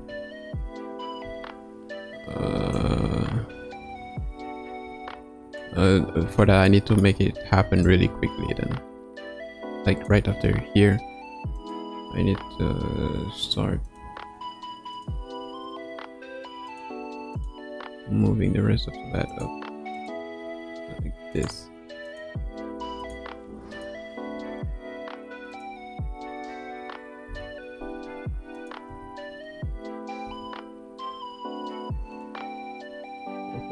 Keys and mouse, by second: 0.0 space, 1.2 space, 2.7-5.6 drag, 6.8 middle click, 7.8-10.1 drag, 11.6 click, 12.4 r, 15.4 r, 17.4-17.8 drag, 17.8 r, 20.4 r, 22.1 click, 23.1 drag, 23.8 click, 24.3 r, 26.2 a, 27.2 i, 28.5 click, 29.0 space, 30.2 space.